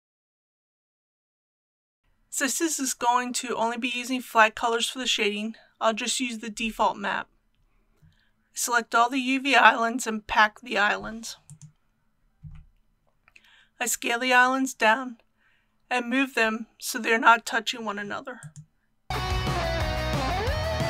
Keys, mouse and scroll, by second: 2.0-2.4 scroll down 1, 2.6 click, 4.6 Tab, 5.7 a, 6.8 Tab, 7.6 typing, 8.1-9.3 drag, 19.1 s, 19.4 click, 19.7 i, 20.2 click.